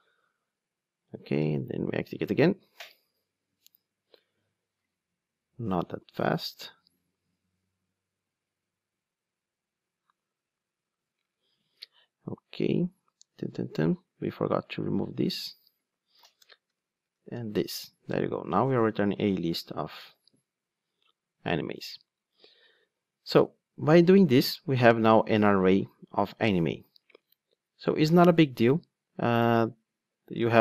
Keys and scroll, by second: 6.5 ctrl+r, 15.1 super+x, 19.1 super+x, 20.1 ctrl+r.